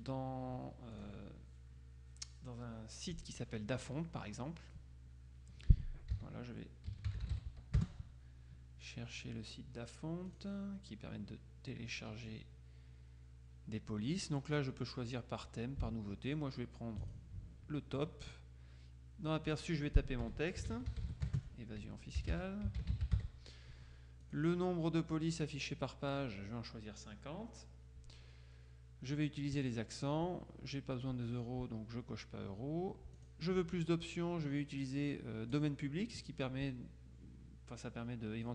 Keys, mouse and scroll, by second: 1.0 click, 6.2-7.7 typing, 7.8 Return, 10.4 click, 17.2 click, 19.6 click, 20.5-23.8 typing, 24.4 click, 25.7 click, 29.6 click, 33.2 click, 35.6 click.